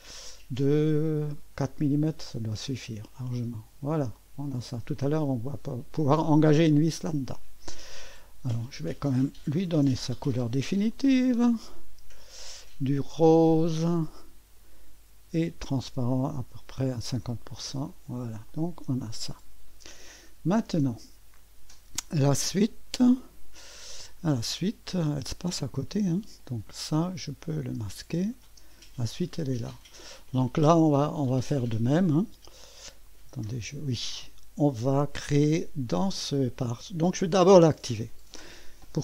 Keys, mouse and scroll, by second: 0.6 click, 3.3-5.6 drag, 5.3 typing, 6.7-8.0 drag, 8.6 click, 9.7 ctrl+d, 10.9 click, 12.2 click, 14.6 click, 15.8-17.9 drag, 18.1 click, 20.3 click, 21.1-22.7 drag, 23.1 click, 25.8 click, 27.0 click, 27.5 click, 27.8-28.5 typing, 28.2 click, 29.5 click, 30.3-31.5 drag, 31.7 click, 33.0 click, 33.3 space, 34.1 space, 35.9 click.